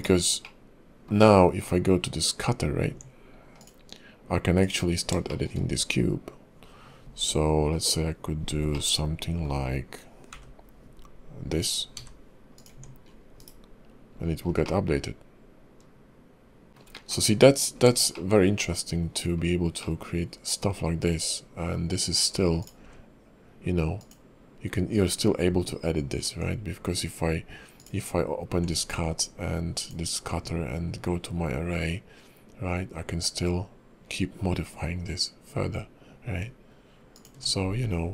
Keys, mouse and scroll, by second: 0.4 middle click, 1.6 scroll down 2, 2.9 Tab, 3.5 click, 4.6 click, 5.3 shift+middle click, 5.5 scroll up 4, 8.7 middle click, 10.3 i, 11.9 e, 12.7 Tab, 13.0-14.1 scroll down 4, 13.4 /, 14.1-14.6 scroll up 4, 14.6 middle click, 16.7 shift+middle click, 16.9 middle click, 17.6-18.1 scroll up 2, 18.1 shift+middle click, 19.4-19.7 scroll down 3, 19.8 middle click, 22.2-22.6 scroll up 2, 22.6 click, 22.8 q, 28.5 q.